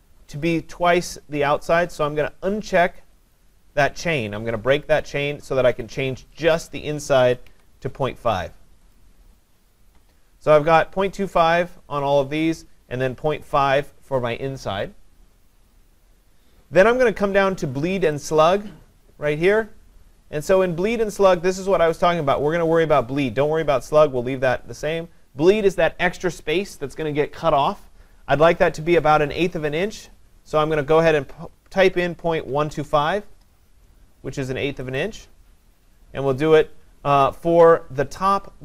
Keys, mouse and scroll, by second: 3.3 click, 6.7 click, 7.0-8.0 typing, 9.0 click, 18.4 click, 30.6 click, 32.1-33.5 typing, 35.0 click.